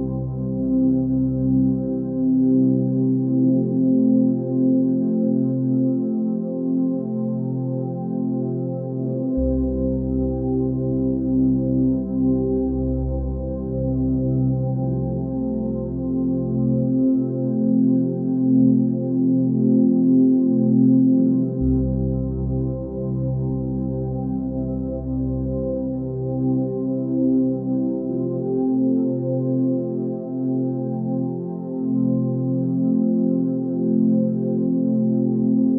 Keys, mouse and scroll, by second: 4.7 ctrl+d.